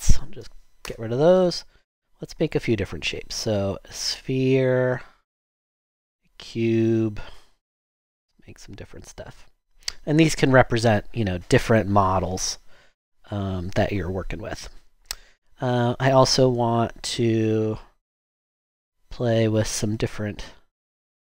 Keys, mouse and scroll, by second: 0.8 shift+BackSpace, 1.5 BackSpace.